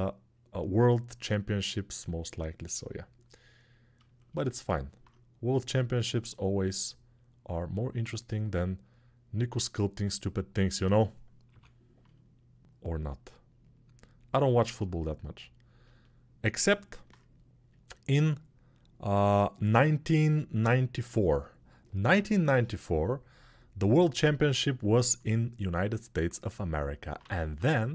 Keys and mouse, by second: 10.6-12.1 middle drag, 11.2 l, 12.1-17.7 drag, 17.7-23.5 middle drag, 21.8 l, 23.5-27.9 drag, 26.9 a.